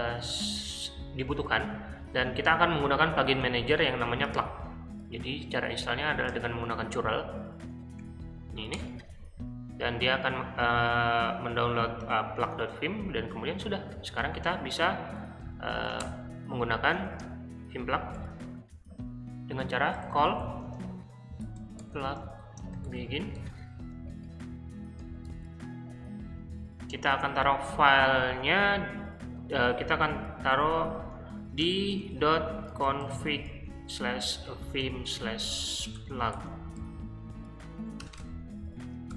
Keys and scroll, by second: 6.3 super+c, 6.7 super+Tab, 7.7 Up, 7.9 Up, 8.7 Return, 11.0 typing, 14.2-15.9 typing, 17.0 shift+g, 18.1-23.8 typing, 25.2 shift+9, 30.5-39.1 typing.